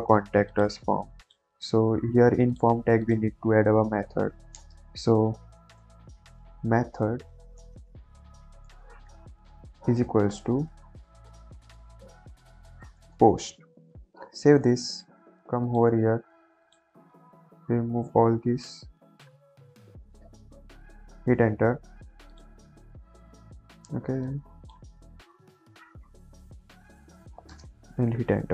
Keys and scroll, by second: 3.7 Left, 4.5-7.2 typing, 8.4-10.7 typing, 11.8-13.0 typing, 14.0 ctrl+s.